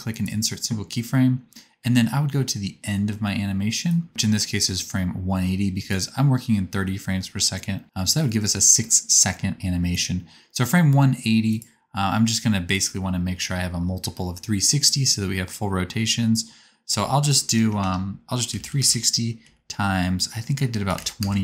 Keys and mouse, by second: 5.9-9.7 drag, 9.7-11.5 right drag, 17.6 BackSpace, 17.7 BackSpace.